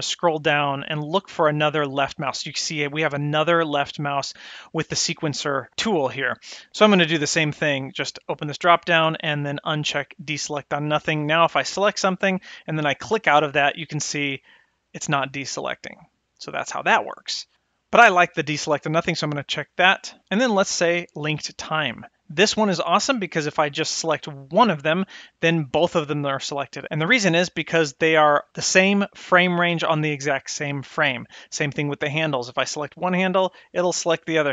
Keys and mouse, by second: 8.0 click, 9.9 click, 11.4 click, 12.9 click, 13.5 drag, 14.2 click, 14.6 click, 15.1 drag, 15.5 click, 15.9 click, 18.9 click, 21.6 click, 32.3 click, 34.0 click.